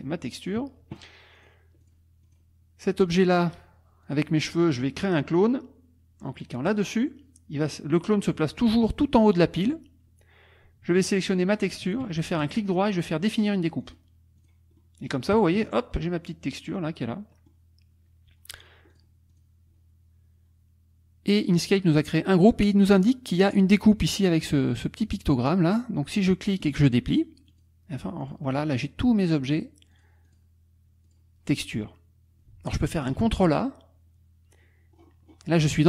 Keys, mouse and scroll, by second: 0.4 click, 1.4 click, 1.8 click, 2.2 click, 4.0 click, 4.5 click, 6.7 click, 11.1 shift+click, 12.4 shift+right click, 13.9 click, 14.4 click, 14.8-18.9 middle drag, 15.6 KP_Subtract, 18.9 click, 19.3 click, 26.6 click, 27.5 click, 28.3 click, 28.7 click, 29.6 click, 30.3 click, 33.2 ctrl+a, 34.9-35.5 scroll up 2, 35.6-35.8 scroll up 2.